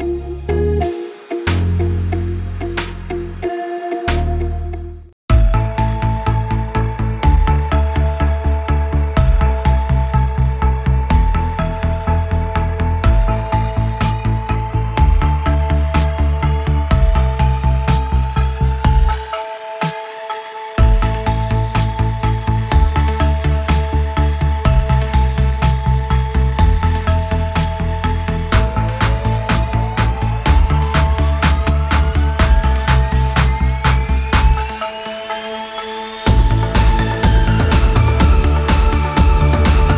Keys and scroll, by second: 4.7 6, 5.0 Return, 18.0 g, 21.2 space, 26.1 space, 27.3 g, 29.1 typing, 30.6 space, 31.4 ctrl+e, 31.4 space, 38.6 t.